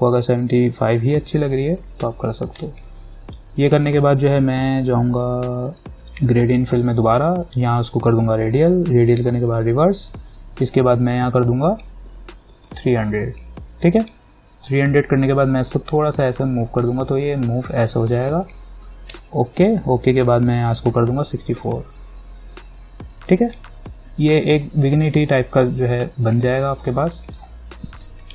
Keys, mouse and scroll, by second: 1.7-2.5 typing, 2.8 click, 12.0-13.4 typing, 15.7-19.3 drag, 21.5-22.3 typing, 22.9-28.1 drag, 28.1 ctrl+-.